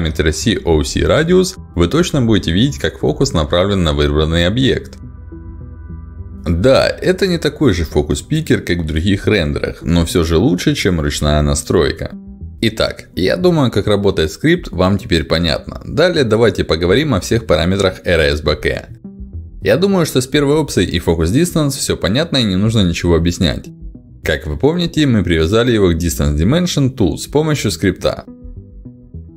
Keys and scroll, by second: 0.6 1, 0.6 0, 0.8 Return, 5.1 1, 5.3 Return, 7.9 5, 8.1 Return, 13.9 ctrl+alt+d, 22.1 ctrl+alt+d, 25.0 ctrl+alt+d.